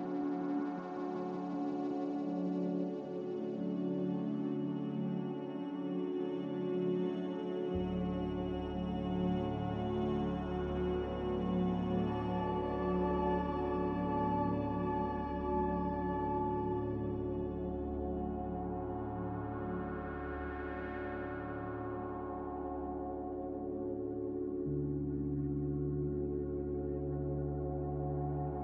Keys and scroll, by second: 2.7 1, 2.7 5, 3.0 Return, 6.9 ctrl+b, 13.1 m, 19.7 typing, 20.7 Delete, 21.7 Delete, 23.0 Delete, 24.7 m, 26.3 Return, 26.3 1, 26.3 5.